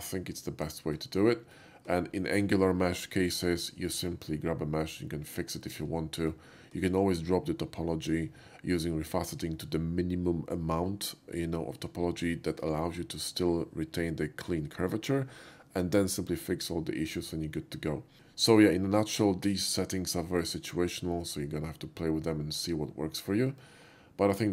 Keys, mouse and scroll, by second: 1.6-2.0 shift+middle drag, 5.4 middle click, 5.8 shift+middle click, 6.4 shift+middle click, 6.8-8.5 shift+middle drag, 18.1 middle click, 23.7 middle click.